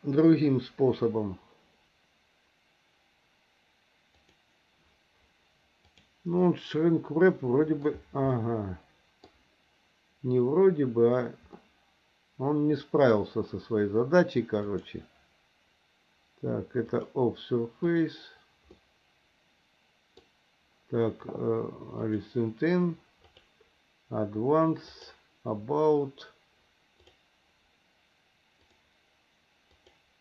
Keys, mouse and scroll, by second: 4.3 click, 5.9 click, 6.4-7.8 middle drag, 8.3 middle click, 11.6-13.1 middle drag, 14.6 click, 16.9-18.0 drag, 18.8-20.2 middle drag, 22.0-23.5 drag, 24.9-27.2 drag, 28.6-29.9 drag.